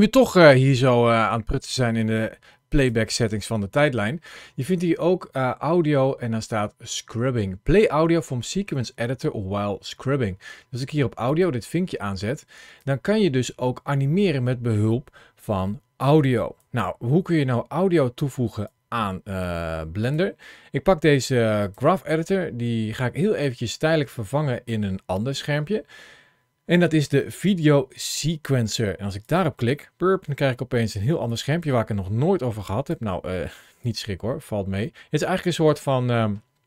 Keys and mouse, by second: 1.1 click, 2.6-11.7 drag, 12.6-16.4 drag, 18.4-19.9 drag, 21.4-29.1 drag, 31.2 click, 32.4 click, 33.6 click.